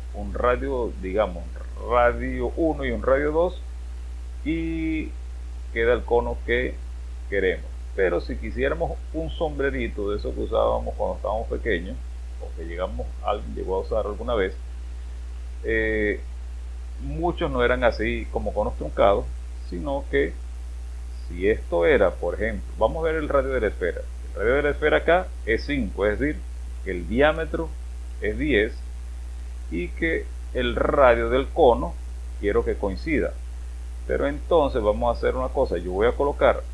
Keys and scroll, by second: 27.3 space, 28.1 space, 31.7 space.